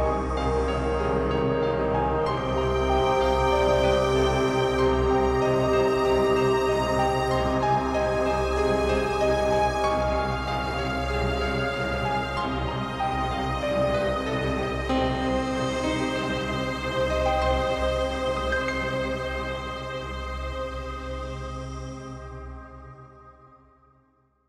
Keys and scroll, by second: 9.9 ctrl+t, 15.1 ctrl+space, 19.8 space.